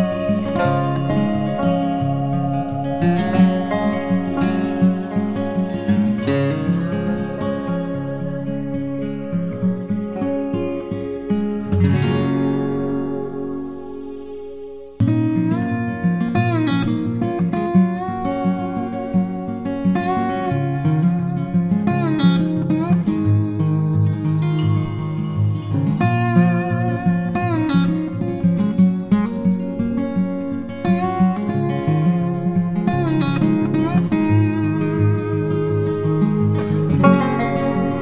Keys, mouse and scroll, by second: 2.7 right click, 4.3 double click, 8.0 right click, 9.0 double click, 19.7-20.5 typing, 36.4 ctrl+t.